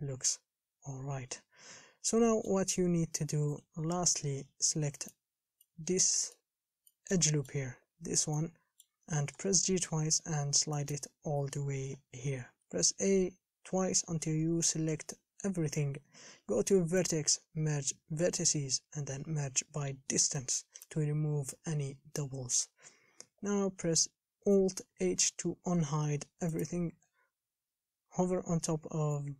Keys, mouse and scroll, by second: 3.7 1, 5.3 alt+click, 5.8-9.7 middle drag, 9.7 g, 12.8 a, 13.2 a, 23.0-23.6 scroll down 2, 23.6-25.1 scroll up 1, 25.1 alt+h, 26.8 click.